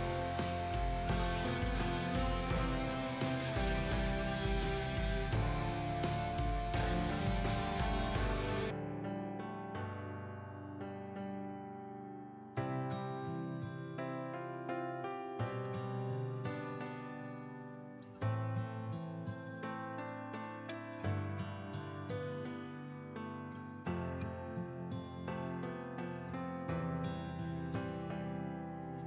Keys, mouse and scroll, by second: 12.8-13.8 scroll up 1, 13.8 click, 15.2 click, 17.2-17.6 scroll down 1, 17.6 click, 17.9-18.3 scroll down 1, 18.3-19.0 scroll up 1, 19.0 click, 21.5 ctrl+z, 21.8 click, 28.6 ctrl+a, 28.7 ctrl+a, 28.9 ctrl+x.